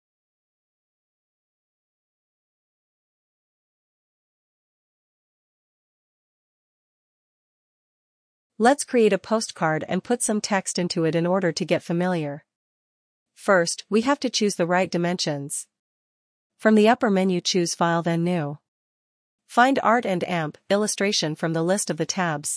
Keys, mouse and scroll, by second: 8.4 click, 11.5 click, 14.7 click.